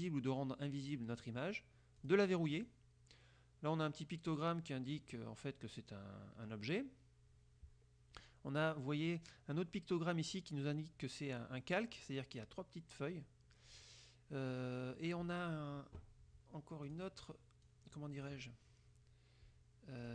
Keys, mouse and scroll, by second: 0.0 click, 0.8 click, 1.4 click, 2.1 click, 2.6 click, 17.0 click, 17.8 click.